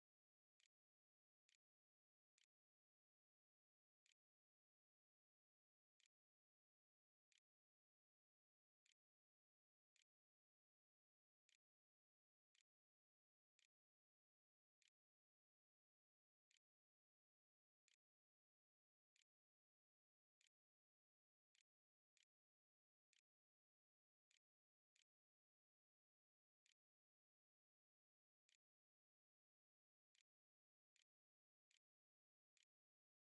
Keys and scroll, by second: 0.0-3.4 typing, 3.6 Tab, 4.6-15.1 typing, 16.3 e, 17.4-21.8 typing, 22.9 p, 24.1 e, 24.5 s, 26.6-33.2 typing.